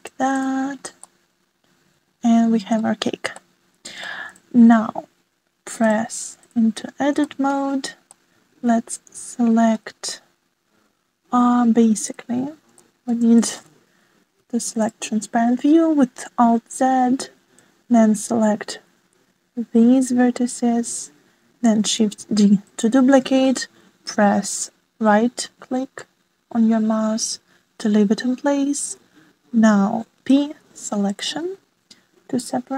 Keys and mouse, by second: 2.0-2.7 middle drag, 2.8 click, 4.5-5.1 drag, 5.8 shift+middle click, 6.7-8.3 middle drag, 10.8 middle click, 11.4 shift+middle click, 12.9 alt+z, 13.4-16.0 drag, 16.1-18.7 drag, 20.5 shift+d, 28.8 p, 31.0 click, 31.9-32.3 drag, 32.3 middle click.